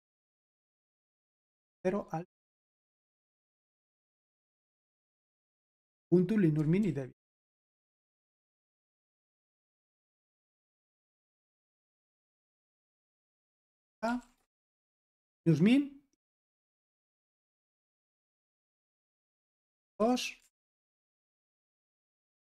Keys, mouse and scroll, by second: 1.5 super+l, 2.6-4.3 typing, 4.8 ctrl+p, 5.2 Return, 6.8 super+l, 7.5-10.5 typing, 9.0 Escape, 11.8-13.5 typing, 14.0 ctrl+p, 14.4 Return, 17.2 super+l, 17.6 super+l, 18.5 super+h, 18.9-21.2 typing, 21.5 ctrl+p, 21.9 Return.